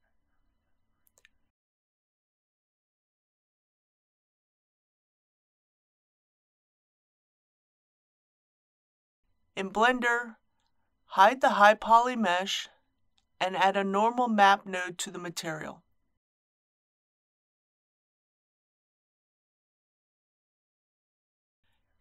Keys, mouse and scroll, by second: 13.0 middle click, 14.3 shift+a, 18.2-22.0 drag.